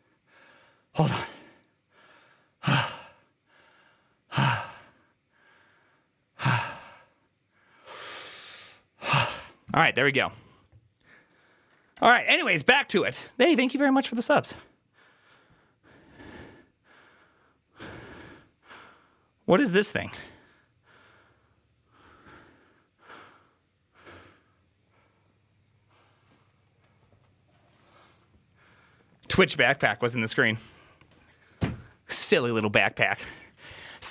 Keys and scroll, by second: 14.1 alt+{.